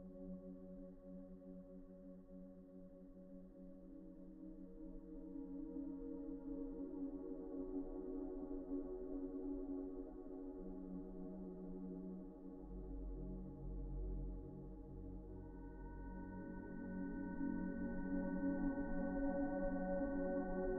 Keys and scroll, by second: 15.4-16.1 typing, 19.9 ctrl+z, 19.9 ctrl+\.